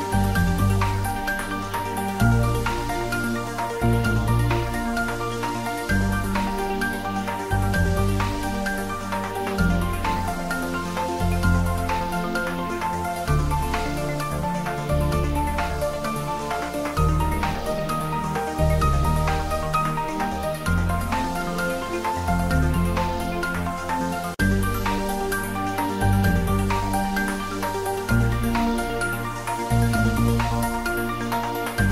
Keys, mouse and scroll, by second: 0.1 click, 0.4 Tab, 1.4 shift+z, 3.4-7.9 drag, 7.9 g, 8.5 x, 13.8 click, 13.9 Tab, 15.0 shift+z, 15.2-17.2 middle drag, 17.2 ctrl+middle click, 17.2-19.2 ctrl+middle drag, 19.1 click, 19.2 click, 20.2-22.5 ctrl+middle drag, 22.5 click, 23.4 ctrl+a, 24.5-30.0 drag, 30.7 shift+middle click, 31.3-31.9 ctrl+middle drag.